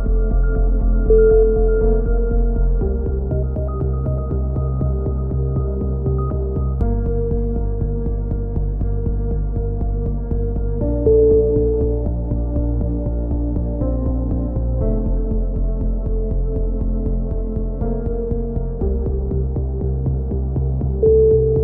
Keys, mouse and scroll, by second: 1.1 a, 3.6-6.3 drag, 6.3 a, 6.6 z, 6.9 Tab, 7.3 click, 10.6-12.6 drag, 11.5 Tab, 12.5 KP_3, 12.8 z, 13.8-14.8 drag, 14.8 KP_3, 16.9-17.9 drag, 18.2 a, 18.4 z, 18.7-19.9 middle drag, 18.9 Tab, 19.8 Tab, 20.0 z.